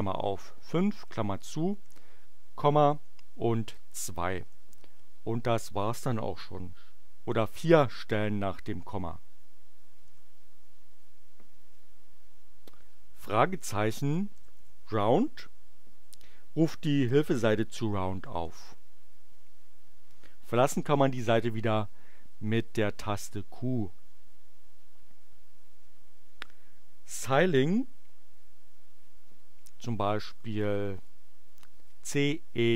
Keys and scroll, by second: 0.0-1.9 typing, 2.9 space, 3.2 2, 3.9 shift+9, 4.4 shift+Return, 10.0 Return, 13.8-15.1 typing, 18.3 Return, 23.1 q, 30.1-31.5 typing.